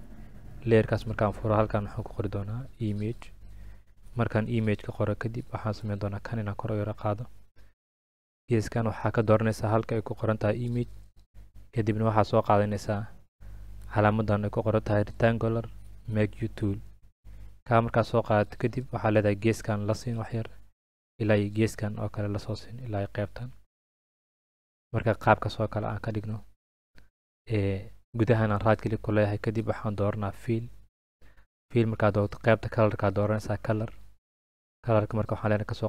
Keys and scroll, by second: 2.3-3.6 typing.